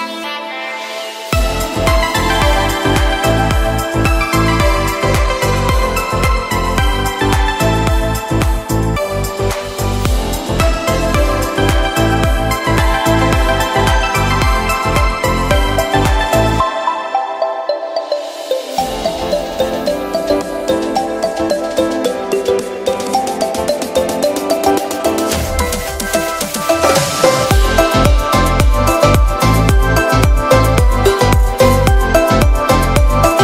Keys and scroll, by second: 0.0 [, 1.5 v, 6.6 b, 7.8 ], 12.3 [, 18.4 e, 19.7 ], 24.4 v, 24.9 super+Tab, 25.7 Delete, 27.8 shift+super+g, 28.4 super+Tab.